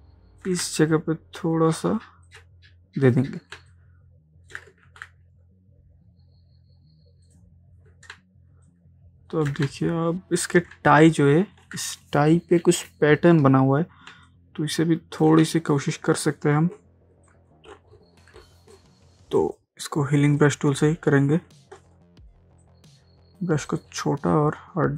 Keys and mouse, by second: 0.1 ctrl+space, 2.3 alt+click, 3.6 ctrl+space, 3.7 ctrl+click, 4.1 ctrl+space, 4.6 ctrl+space, 4.9 ctrl+z, 7.3 click, 8.2 ctrl+space, 9.7 space, 9.8 click, 10.2 space, 10.8 ctrl+space, 10.9 ctrl+click, 11.3 ctrl+space, 11.8 ctrl+space, 14.1 ctrl+space, 14.3 ctrl+click, 14.6 ctrl+space, 15.3 ctrl+space, 17.3-22.7 drag, 22.7 alt+right click.